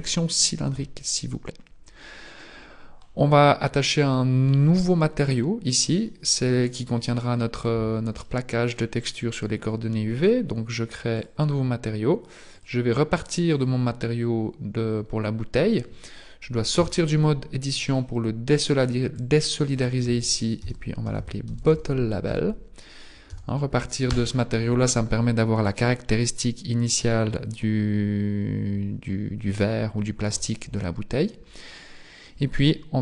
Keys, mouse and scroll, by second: 1.1-1.7 scroll down 1, 1.7-2.2 scroll down 3, 2.2-2.9 scroll up 2, 6.2 click.